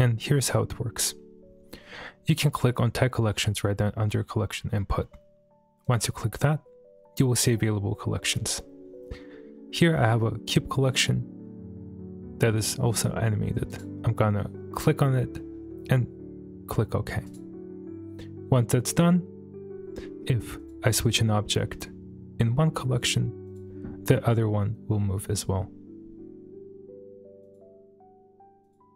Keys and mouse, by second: 5.8-17.4 drag, 20.6 click, 23.4 click, 25.3 click, 27.4 click, 28.6 click.